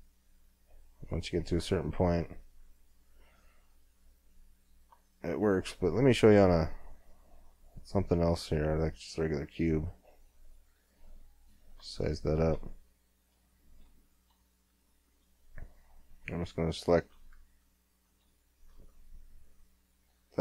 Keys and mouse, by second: 1.7 click, 2.5 middle click, 2.9 click, 2.9 middle click, 4.2 middle click, 5.2 middle click, 5.7 shift+a, 9.5 g, 10.7 s, 12.1 middle click, 12.5 middle click, 12.7 middle click, 14.3 Tab, 20.1-20.4 middle drag, 20.1 w.